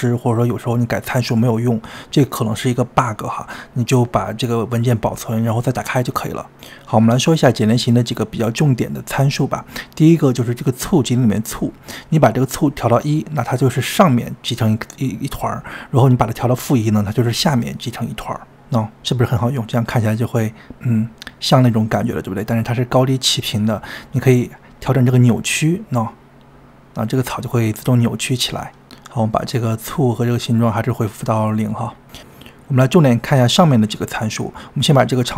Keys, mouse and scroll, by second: 3.0 scroll up 1, 22.7-24.7 middle drag.